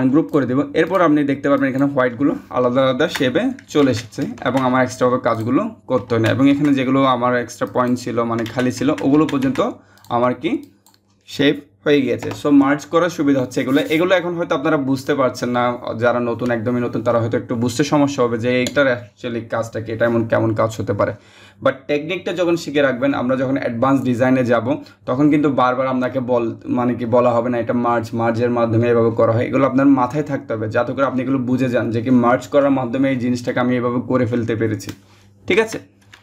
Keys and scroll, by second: 3.4 ctrl+z, 8.0 ctrl+z, 11.8 BackSpace.